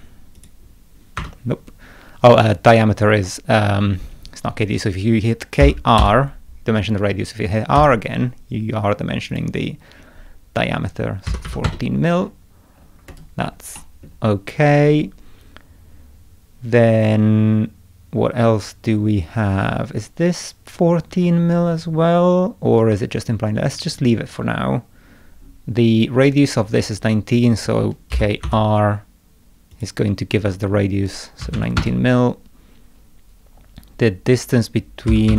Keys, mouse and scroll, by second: 0.4 click, 1.2 Escape, 5.6 k, 6.0 r, 7.8 r, 9.3 click, 12.2 scroll up 2, 12.8 scroll down 2, 13.1 right click, 13.8 middle click, 28.1 k, 28.4 r, 29.7 click, 34.9-35.3 typing.